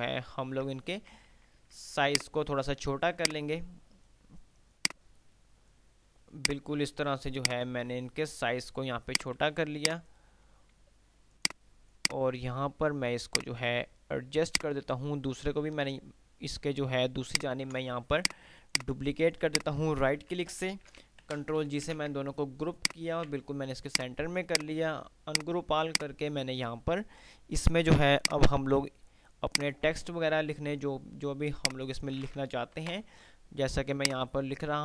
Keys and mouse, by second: 1.4 ctrl+r, 2.2-2.9 drag, 5.2-6.1 drag, 8.4 F3, 9.7 F2, 10.1 F2, 10.1 click, 11.6-13.2 drag, 17.2 ctrl+right click, 18.4 click, 19.4 shift+click, 20.4 e, 21.1 ctrl+g, 21.4 Delete, 22.2 ctrl+z, 23.1 shift+click, 23.1 c, 24.1 click, 26.1 F3, 28.4-28.9 drag, 31.1 F2, 33.1 shift+Page_Up, 34.2-34.8 drag.